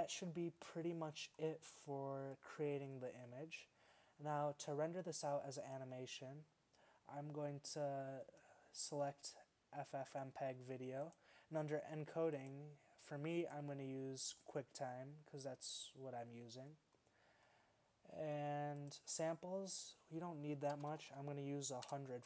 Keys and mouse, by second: 14.5-21.9 drag, 21.9 0.